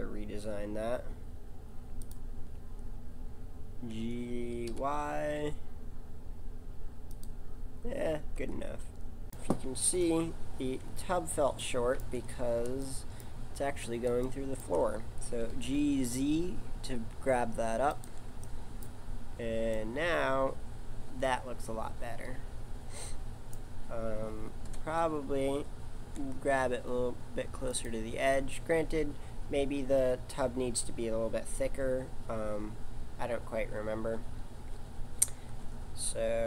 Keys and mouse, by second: 3.3 click, 3.9 g, 8.4 Tab, 10.0 KP_1, 15.4 g, 24.6 KP_7, 25.9 g.